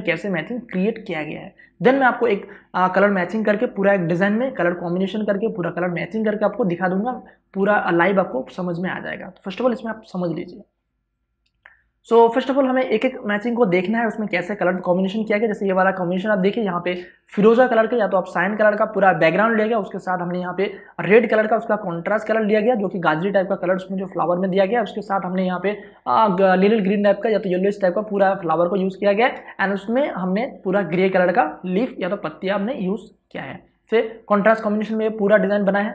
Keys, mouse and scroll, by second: 10.9 click, 14.3 ctrl+space, 17.6 ctrl+click, 31.2 space, 31.5 ctrl+click.